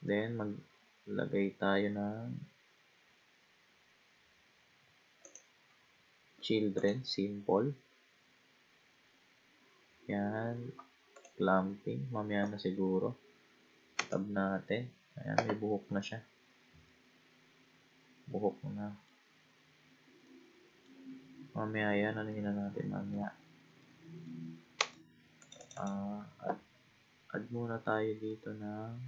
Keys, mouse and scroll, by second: 0.6-3.1 scroll down 3, 5.2 click, 6.0-6.8 scroll down 4, 6.8 click, 7.2-8.4 scroll down 5, 8.5-9.6 scroll down 1, 9.6 scroll down 4, 10.4-11.0 scroll down 1, 11.2-12.6 drag, 12.6-13.9 scroll up 1, 14.0 Tab, 16.0-19.1 middle drag, 20.3 middle click, 21.1-22.3 scroll down 6, 22.3-24.8 middle drag, 24.8 Tab, 25.4 click, 25.6 click, 28.3-29.0 middle drag.